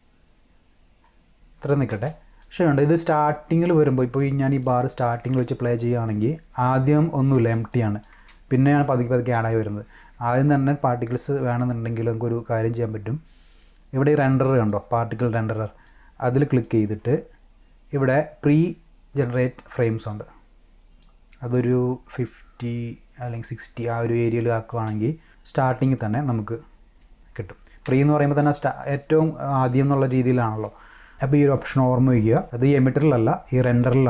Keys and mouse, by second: 1.9 space, 2.4 click, 3.2 click, 4.6 click, 5.2 space, 7.4 space, 7.7 click, 8.2 space, 14.6 click, 15.9-16.6 drag, 20.1 click, 21.5-23.4 drag, 24.7 click, 25.2 space, 27.8 space, 33.6 click.